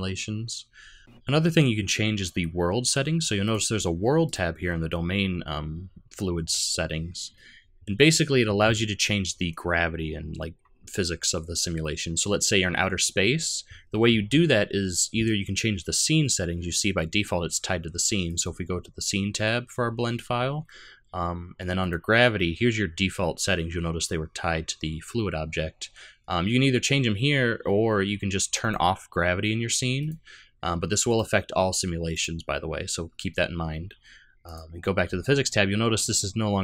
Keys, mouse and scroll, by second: 1.0 click, 3.4 click, 4.3 click, 4.6-7.3 scroll down 8, 7.3-8.0 scroll down 1, 18.3 click, 21.8 click, 28.6 click, 30.0 click, 31.1 click, 32.1 click, 34.5 click, 35.3-36.1 scroll down 4.